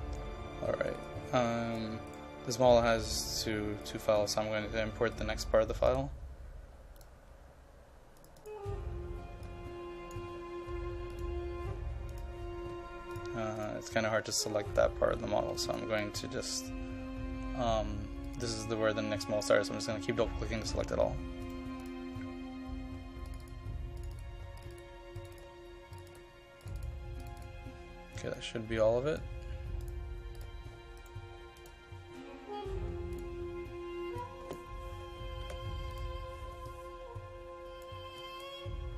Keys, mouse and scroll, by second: 2.1 right click, 3.8-13.1 drag, 14.1-14.5 scroll down 1, 14.5 click, 15.1-15.5 scroll down 1, 15.6 ctrl+click, 18.3-20.3 drag, 21.4 right click, 21.8-31.0 drag, 31.0 right click, 31.6 click, 35.4 KP_1, 35.9 click.